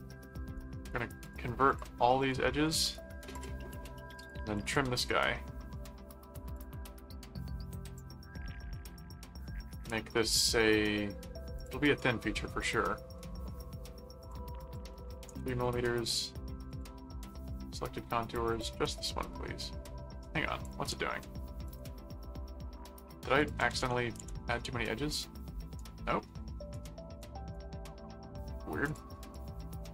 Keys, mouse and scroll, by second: 0.6 right click, 1.2-2.7 drag, 2.6 right click, 3.3 click, 4.2 click, 5.0 middle click, 6.6 click, 9.0 middle click, 9.9 middle click, 11.6 click, 12.4 middle click, 14.2 click, 16.7 click, 17.5 click, 18.5 click, 20.2 middle click, 20.6 click, 21.6 click, 23.4 ctrl+click, 23.6 ctrl+a, 25.1 click, 25.8 right click, 27.2 right click, 28.9 click.